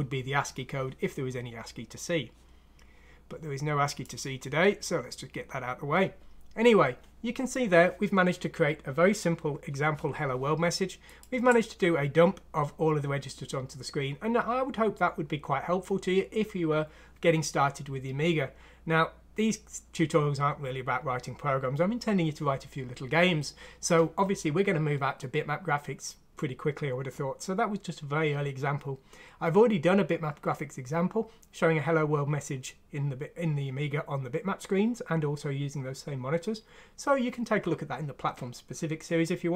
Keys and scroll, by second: 11.9 ctrl+alt+!.